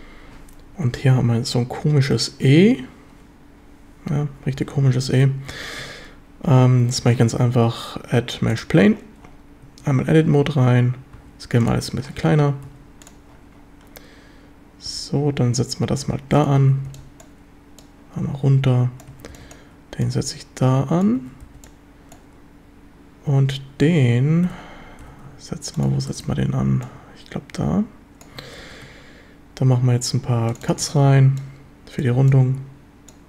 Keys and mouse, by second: 4.8 z, 5.6 z, 7.0 shift+a, 9.7 Tab, 11.2 s, 11.7 click, 12.7 s, 13.1 click, 14.9 g, 16.4 click, 16.6 a, 16.9 b, 17.8-19.1 drag, 19.1 a, 19.3 b, 20.1 click, 21.2 a, 21.5 b, 24.5 g, 25.1 x, 25.8 ctrl+click, 26.1 shift+drag, 26.9-28.2 drag, 28.6 ctrl+r, 30.7 click, 30.9 a, 31.1 b, 32.2 b.